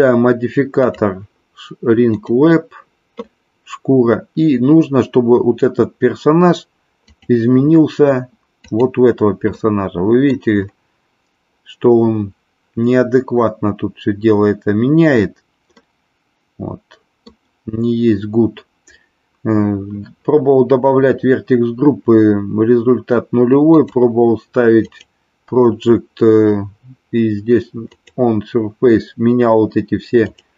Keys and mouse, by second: 0.7-2.4 drag, 7.0 click, 9.5-10.4 middle drag, 15.8-17.4 middle drag, 23.6-25.0 drag, 27.9-30.5 drag.